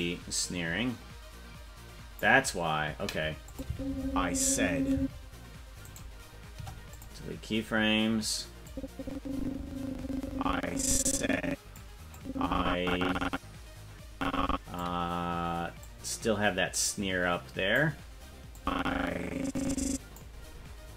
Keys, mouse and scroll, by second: 0.0-2.2 drag, 3.5 click, 3.6 space, 4.9 space, 5.8 right click, 6.5 Delete, 8.6-11.8 drag, 12.1-14.8 drag, 15.8-17.8 drag, 18.5-20.2 drag.